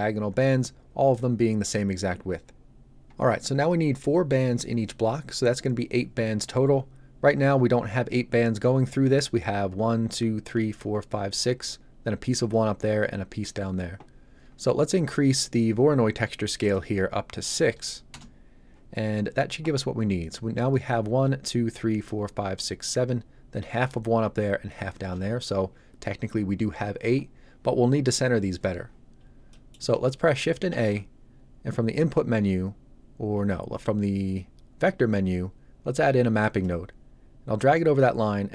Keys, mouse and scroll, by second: 16.5 click, 17.5 KP_6, 18.0 Return, 29.1 scroll down 1, 29.4 middle click, 30.6 shift+a, 36.4 click.